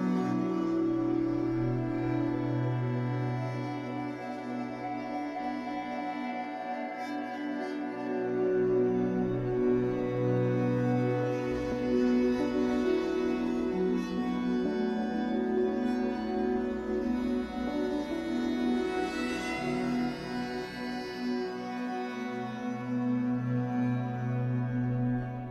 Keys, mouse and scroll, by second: 0.0-1.9 middle drag, 0.6 scroll down 2, 1.0-1.5 scroll up 2, 1.9-3.5 drag, 3.5 middle click, 4.1 scroll down 2, 4.3 shift+middle click, 5.0 Tab, 6.9 z, 7.7 middle click, 8.2 Tab, 8.4-10.1 middle drag, 10.1 scroll up 2, 10.3-12.5 shift+middle drag, 11.2 scroll up 2, 12.5 click, 12.7 middle click, 13.1 shift+click, 14.1 f, 14.9-25.5 middle drag, 15.8 f, 16.1 scroll down 2, 17.0 f, 20.5 f, 22.9 scroll down 2, 24.9-25.5 scroll up 2.